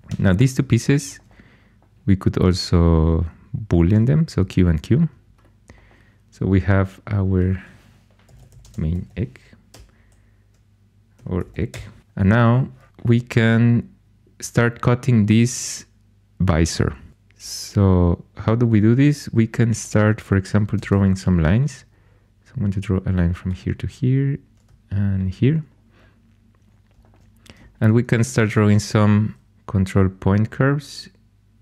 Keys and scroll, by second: 0.0 4, 3.7 typing, 8.0-11.7 typing, 20.8 shift+a, 28.1 ctrl+super+c.